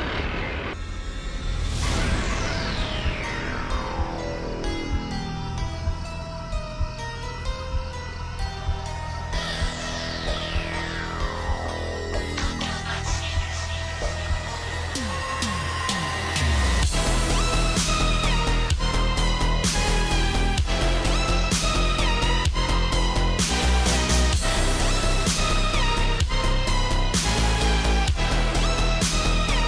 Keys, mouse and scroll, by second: 0.1 click, 1.1 Up, 5.5 alt+scroll up 1, 5.7 alt+scroll down 1, 5.9 alt+scroll up 1, 6.1 click, 6.3 space, 6.5 click, 6.9 right click, 7.2 click, 10.4 click, 12.1-12.4 scroll up 1, 14.8-15.4 scroll up 1, 17.8 click, 19.2-21.2 drag, 22.0-22.3 alt+scroll up 1, 22.3-23.7 drag, 23.8 shift+m, 24.5-25.1 alt+scroll up 1, 26.4-26.8 alt+scroll up 1, 26.8 alt+click.